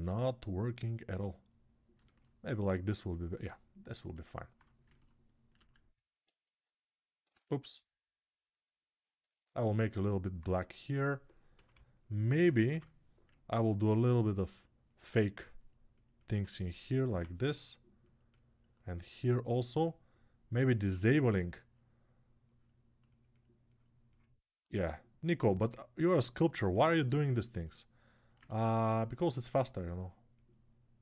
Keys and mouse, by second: 5.5 alt+q, 7.1 ctrl+z, 10.1-20.9 ctrl+alt+drag, 20.9-22.2 middle drag, 22.2-31.0 ctrl+drag.